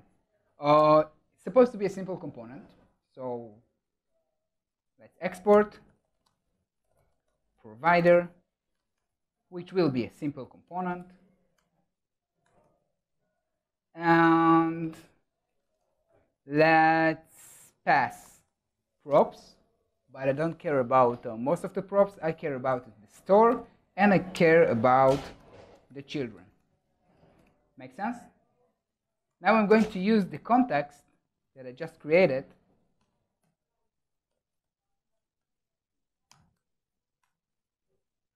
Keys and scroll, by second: 12.6 super+s, 26.5 super+s, 29.1 Tab, 37.5 super+s.